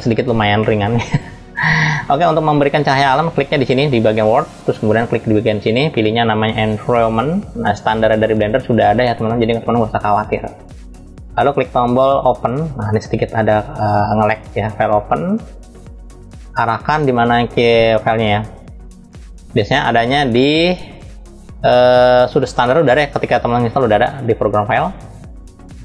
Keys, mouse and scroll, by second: 3.8 click, 5.2-12.7 drag, 15.2 click.